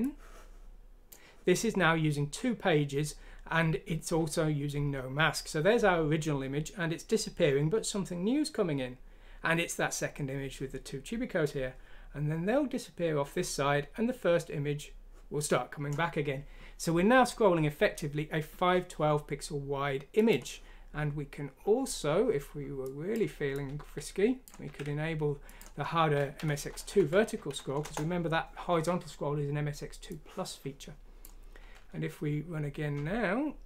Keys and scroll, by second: 24.6 ctrl+q, 26.9 F6, 27.8 Return.